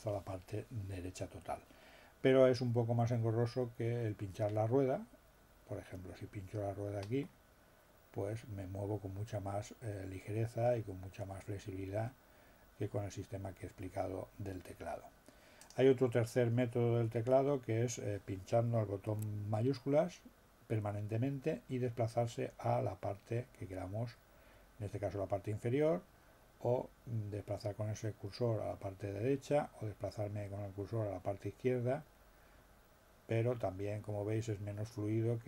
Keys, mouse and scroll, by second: 7.2 middle click, 15.6 click.